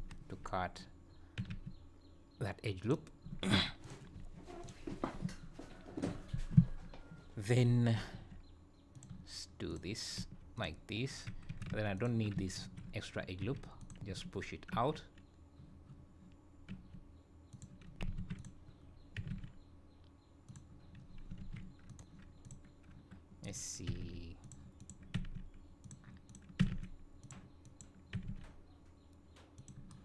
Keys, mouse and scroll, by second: 1.4 g, 3.5 alt+a, 3.8 click, 4.6 ctrl+click, 7.9 g, 9.7 click, 10.1 g, 11.5 2, 11.9 alt+click, 12.5 ctrl+x, 13.4 1, 13.8 click, 16.7 g, 18.2 alt+a, 18.3 click, 19.1 g, 21.4 alt+a, 21.8 click, 22.4 click, 23.4 click, 23.8 g, 24.8 click, 25.1 g, 26.2 click, 26.6 g, 27.6 click, 28.1 g.